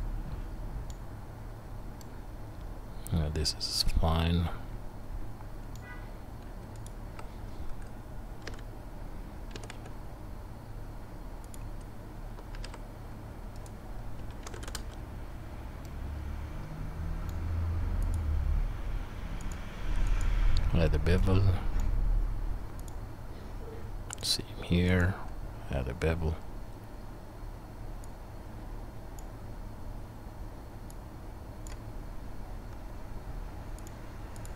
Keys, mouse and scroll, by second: 6.9-8.6 shift+middle drag, 8.4 KP_3, 9.5 g, 12.5 shift+a, 14.2 s, 19.6-22.9 drag, 22.9-24.2 middle drag, 24.2-29.3 drag, 29.3-30.9 middle drag, 30.9 click, 31.7-33.9 middle drag, 33.9-34.5 drag.